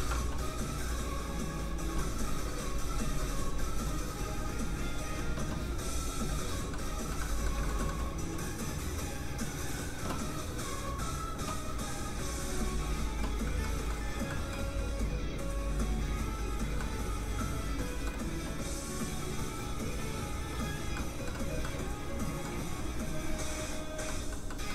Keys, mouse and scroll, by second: 1.1 z, 1.2 click, 6.7 middle click, 7.4 scroll up 1, 7.6 shift+middle click, 7.8 middle click, 8.7 click, 13.6 middle click, 14.9 click, 16.8 middle click, 19.2 click, 20.9 middle click, 23.2 click, 24.1 middle click.